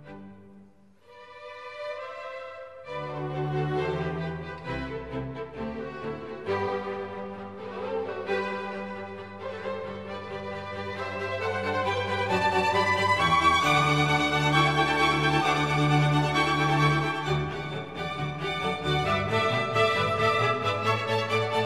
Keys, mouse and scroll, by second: 0.0 Up, 1.9 ctrl+j, 21.5-21.6 typing.